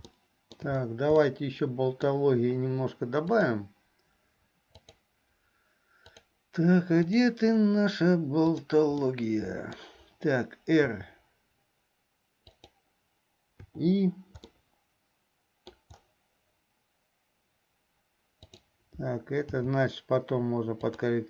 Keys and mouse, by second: 0.4 shift+middle click, 1.4 middle click, 3.6-6.5 drag, 7.2 click, 8.5 click, 9.2 middle click, 11.0 r, 13.8 i, 14.6-15.9 middle drag, 18.5 click.